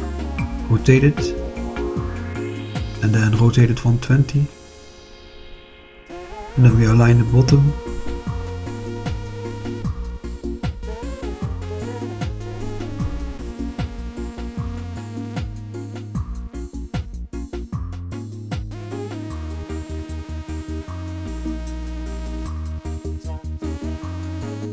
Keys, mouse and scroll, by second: 0.1 click, 2.0 r, 2.4 9, 2.7 0, 3.5 Return, 5.0 r, 5.5 1, 5.7 2, 6.0 0, 7.0 Return, 9.0-9.8 drag, 10.9 click, 11.5-12.1 drag, 13.2 click, 16.0 click, 18.1-20.4 drag, 21.3 click, 22.1-24.3 drag.